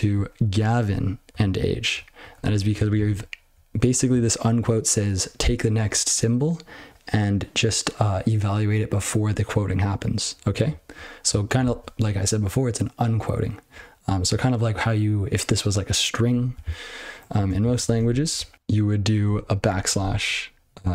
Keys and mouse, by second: 0.1 ctrl+f, 0.1 ctrl+f, 0.5-0.8 ctrl+f, 1.3 ctrl+f, 1.9-2.3 ctrl+p, 2.5 ctrl+p, 2.7 ctrl+n, 2.9 ctrl+n, 3.1-3.5 ctrl+b, 3.8 ctrl+b, 10.6 ctrl+f, 10.8 ctrl+f, 10.9 ctrl+f, 17.1 ctrl+p, 17.6 ctrl+n, 17.9 ctrl+shift+o, 18.5 ", 19.3 \, 20.7-20.9 typing.